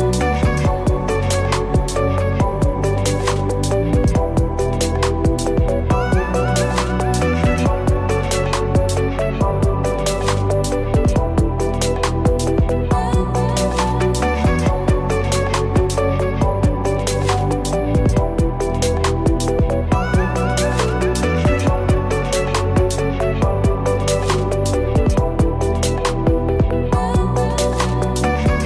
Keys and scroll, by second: 0.2 ctrl+=, 1.4 ctrl+Return, 2.6 ctrl+d, 25.6 ctrl+-, 27.0 ctrl+=.